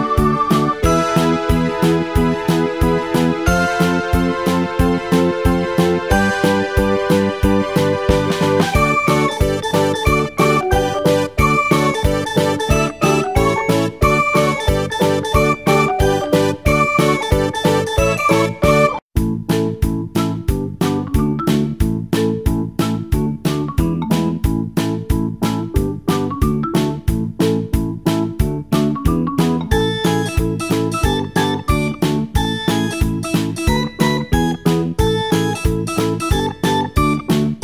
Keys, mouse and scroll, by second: 0.1-5.2 drag, 6.2-9.3 drag, 12.4 click, 17.6-20.8 drag, 20.9-21.7 scroll down 1, 21.7-27.0 scroll down 1, 27.0-29.3 scroll down 1, 29.3-35.1 drag, 36.3-37.6 scroll down 1.